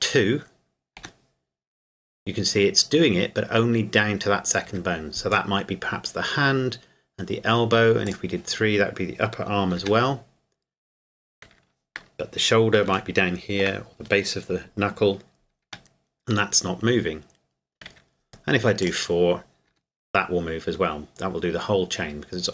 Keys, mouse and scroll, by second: 1.0 g, 4.6 Escape, 8.1 click, 9.8 g, 11.5 Escape, 13.2 shift+middle click, 15.6 g, 17.9 Escape, 18.8 click, 19.7 g, 22.0 Escape.